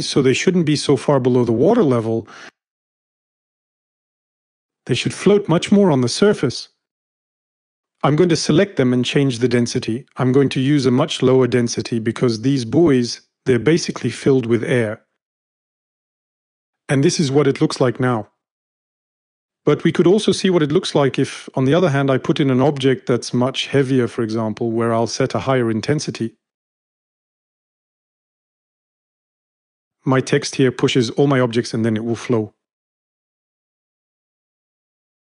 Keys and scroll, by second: 10.9-12.0 typing, 24.4 3.